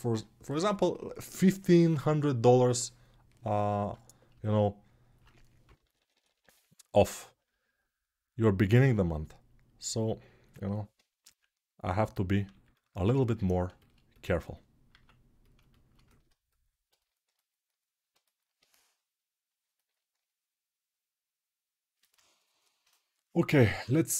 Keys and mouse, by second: 13.3-15.2 alt+shift+drag, 15.2-17.3 alt+shift+right drag, 17.3-24.1 alt+drag.